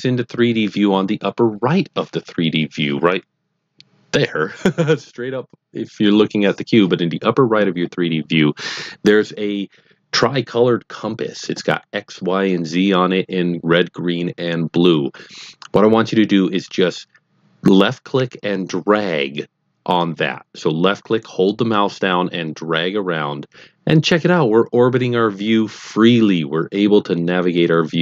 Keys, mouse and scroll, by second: 21.7 click.